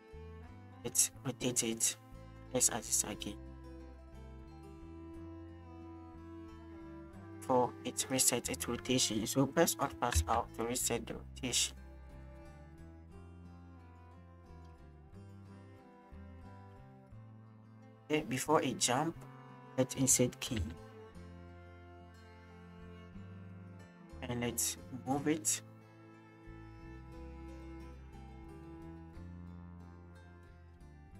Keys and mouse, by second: 0.6-0.9 shift+drag, 4.5 shift+middle click, 6.0-8.1 drag, 10.1 alt+r, 12.1 click, 13.6-16.1 drag, 16.3 click, 16.8-19.5 drag, 21.5 click, 21.5 i, 22.9 shift+click, 23.6 click, 25.2-27.7 drag, 28.2-28.6 shift+middle drag, 29.2-31.1 drag.